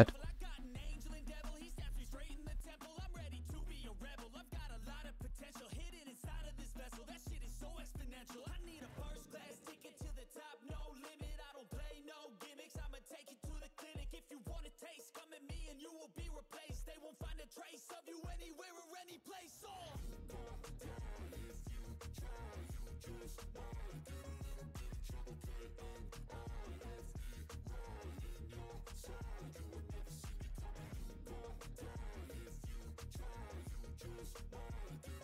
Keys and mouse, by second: 8.9 click, 10.1 click, 13.7 ctrl+z, 16.9 click, 18.8 click, 20.3 ctrl+z, 22.0 click, 23.0 click, 24.1 ctrl+z, 25.8 click, 32.2 a.